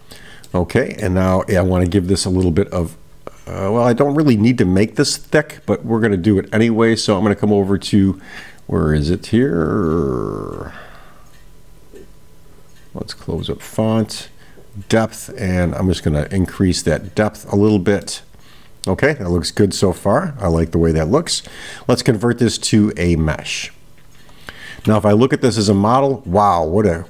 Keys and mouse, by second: 0.5-1.5 middle drag, 13.6 click, 14.8-17.5 drag, 18.1-20.2 middle drag, 22.1-23.8 right drag, 25.5-27.0 middle drag.